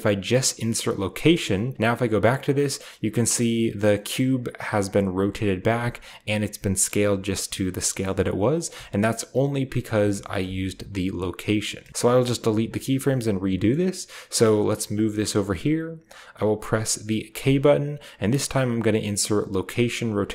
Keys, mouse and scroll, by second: 1.0 click, 1.7-2.6 drag, 4.0-5.6 drag, 8.5-10.2 drag, 10.2 k, 11.9 alt+s, 12.0-13.2 alt+drag, 13.3 g, 14.8-16.3 drag, 17.2 k.